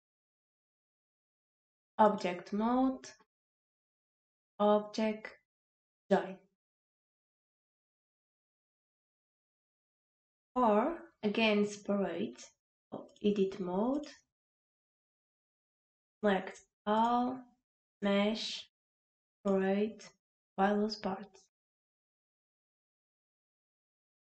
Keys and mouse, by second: 1.3 click, 4.3-6.0 drag, 13.1-14.2 drag, 16.2 click, 17.9-20.5 drag.